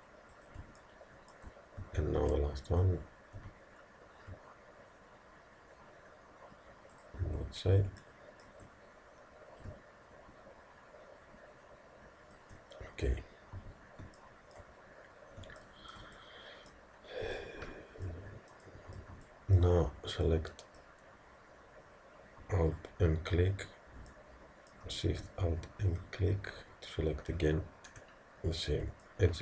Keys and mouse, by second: 1.9 a, 2.2 b, 3.4 g, 8.0-9.6 middle drag, 9.6 click, 13.6 a, 14.2-17.8 middle drag, 17.3 z, 22.7 click, 24.1-25.9 middle drag, 25.9 click, 27.9 KP_1.